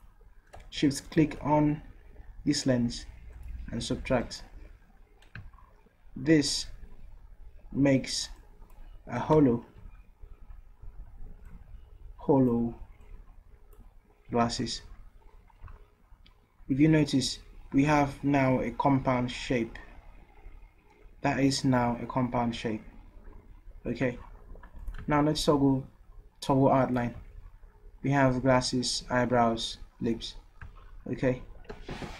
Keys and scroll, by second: 9.4 ctrl+z, 9.7 ctrl+z, 14.6 ctrl+z, 15.6 ctrl+z.